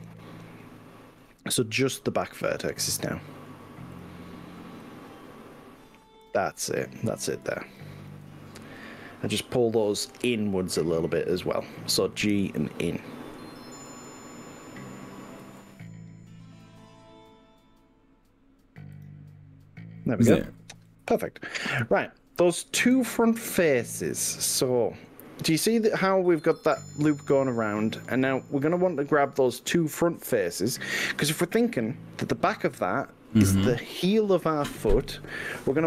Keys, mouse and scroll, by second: 1.7-3.6 middle drag, 4.0 click, 4.9 click, 6.4-7.2 drag, 8.0 shift+click, 8.7-11.9 middle drag, 12.3 KP_1, 14.0 g, 15.5 x, 19.0 click, 20.9-25.1 middle drag, 25.6 click, 26.6-31.2 middle drag, 31.8-33.3 middle drag.